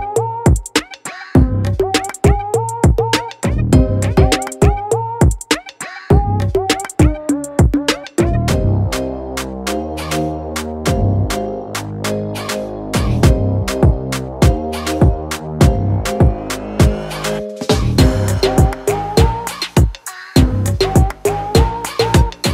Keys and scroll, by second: 7.3 ctrl+t.